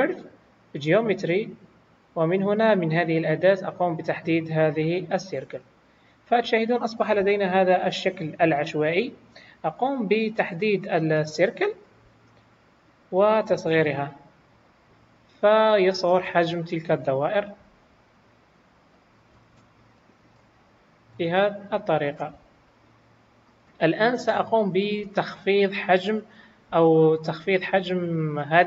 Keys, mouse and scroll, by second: 1.2-3.1 scroll down 5, 3.1 click, 3.1-3.7 scroll down 3, 7.2 KP_1, 10.1 scroll down 3, 10.5 middle click, 11.7 click, 12.4-13.5 scroll up 1, 13.5 scroll up 1, 13.5 s, 16.4-16.9 scroll up 2, 17.3 scroll up 2, 17.3 scroll down 2, 17.6 s, 20.0 shift+middle click, 20.6 s, 22.3 scroll up 4, 23.5 scroll up 2, 25.2 middle click, 25.9 scroll down 1, 26.3 middle click, 27.4 click.